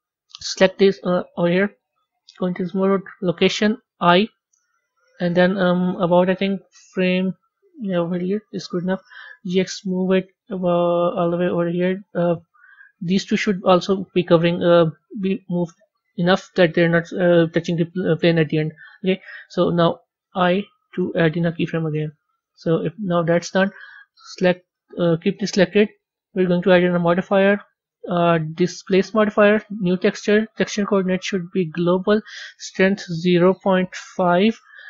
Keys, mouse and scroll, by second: 1.8 click, 7.0 click, 8.9 g, 12.6-15.7 middle drag, 21.1 i, 22.5-24.6 drag, 25.8 click, 26.5-29.6 drag, 29.7 click, 30.1-34.8 drag.